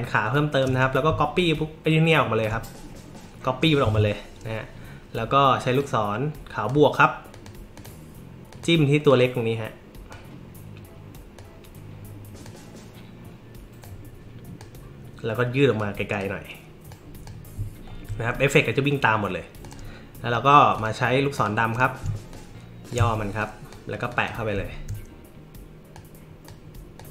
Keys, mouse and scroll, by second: 1.4-2.4 alt+drag, 3.8 a, 5.8-6.7 drag, 7.3 click, 7.7 click, 8.5 click, 9.1-10.1 drag, 11.3-12.4 drag, 13.8 click, 15.7-16.2 drag, 16.9 click, 17.2 m, 19.6 click, 20.7 click, 21.3 click, 22.3 alt+shift+click, 23.4-23.7 drag, 24.1 drag, 24.6 alt+scroll up 2, 24.7 alt+scroll down 2, 25.9 click, 27.0 click.